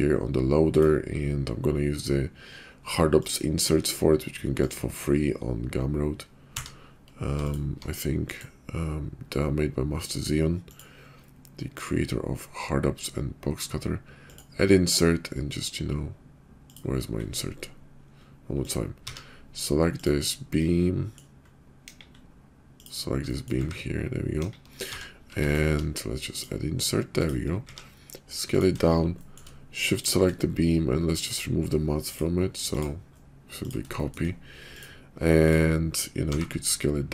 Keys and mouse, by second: 6.5 q, 19.0 q, 19.9 click, 20.5-21.2 drag, 21.9 KP_5, 23.2 drag, 23.6 `, 24.3 KP_5, 24.7 q, 27.6 s, 29.2 shift+click, 31.2 click, 32.1-32.8 drag, 34.0 shift+click, 35.3 click, 36.2 s.